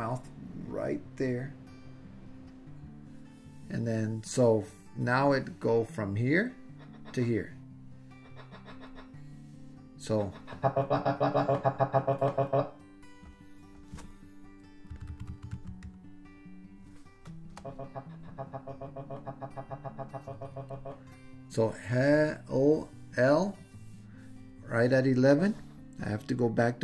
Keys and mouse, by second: 5.3-9.0 drag, 10.2-12.6 drag, 17.7-20.9 drag, 25.4-26.7 drag.